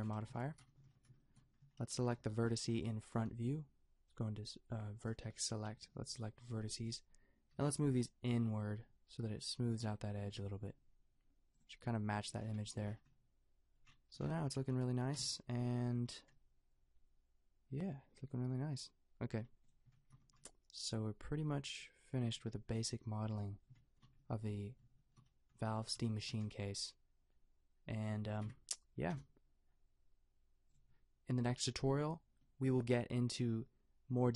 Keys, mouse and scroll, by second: 0.9 Tab, 6.0 b, 7.6 g, 12.2 Tab, 12.8 a, 15.1 KP_5, 19.6-23.5 drag, 20.3 a, 28.4 KP_Decimal, 29.1 KP_0.